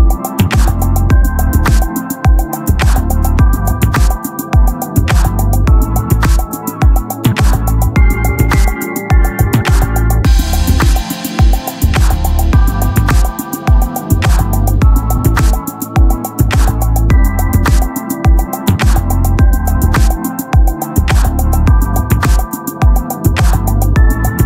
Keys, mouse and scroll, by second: 1.4-10.7 drag, 10.7-14.7 middle drag, 14.8-17.4 middle drag, 18.0-19.9 drag, 19.9 KP_0, 20.5 q, 21.0 e, 21.8 shift+q, 23.1 right click.